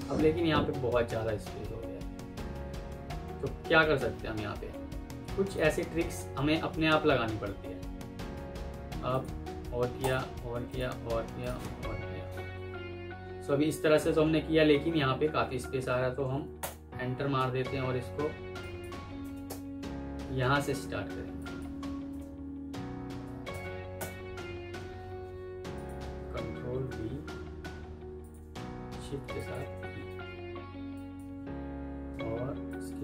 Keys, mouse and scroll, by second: 16.5 Return, 19.1 Insert, 19.4 Return, 23.4 typing, 23.9 Return, 26.7 typing, 29.3 shift+click, 29.6 typing, 30.0 Escape, 32.6 shift+click.